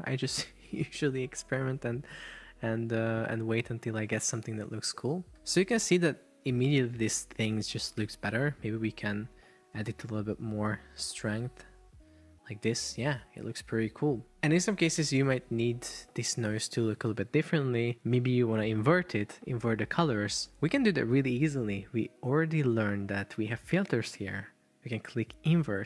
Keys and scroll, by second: 5.7 super+p, 8.1 Escape.